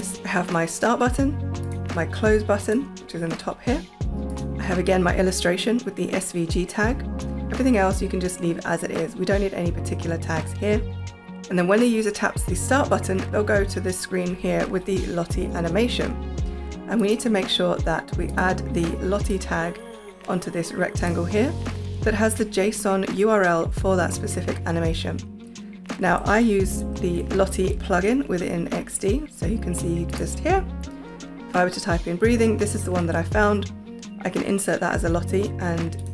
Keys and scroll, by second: 26.9 shift+super+p.